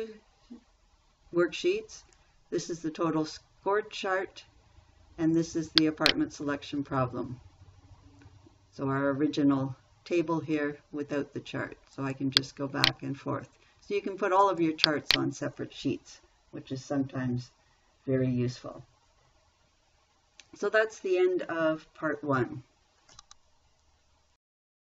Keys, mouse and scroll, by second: 5.7 click, 12.4 click.